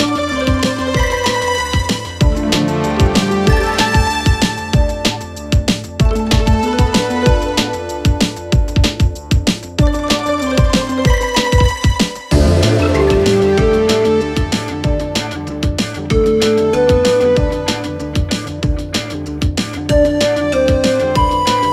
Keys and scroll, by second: 1.9 F4, 2.6 F3, 3.0 Escape, 6.1 Escape, 6.3 F2, 13.1 space, 13.4 F4, 13.8 Escape, 14.1 F3, 14.6 Escape, 16.8 shift+F2, 18.0 F9, 19.8 F3.